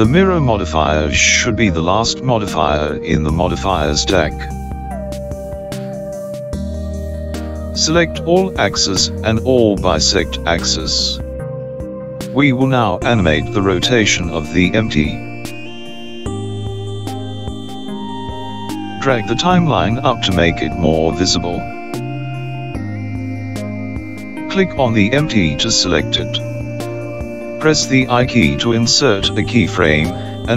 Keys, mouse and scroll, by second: 2.8-5.3 scroll down 8, 8.2 click, 9.3 click, 10.5 click, 11.8 click, 12.8 click, 21.5 click, 27.3 click.